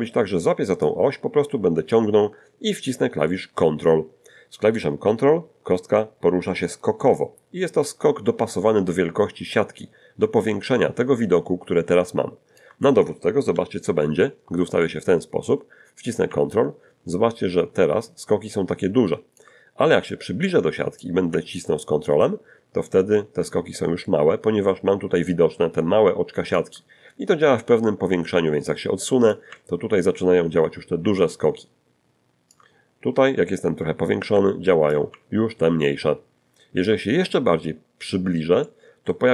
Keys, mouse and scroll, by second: 0.8-12.8 drag, 16.1-19.6 ctrl+drag, 19.8-20.3 ctrl+scroll up 1, 21.0-26.7 ctrl+drag, 27.3-27.9 ctrl+scroll down 1, 29.3-32.7 ctrl+drag, 32.8-33.2 ctrl+scroll up 1, 34.9-37.0 ctrl+drag, 37.2-37.7 ctrl+scroll up 2, 37.7-38.4 scroll up 3, 38.6 shift+click.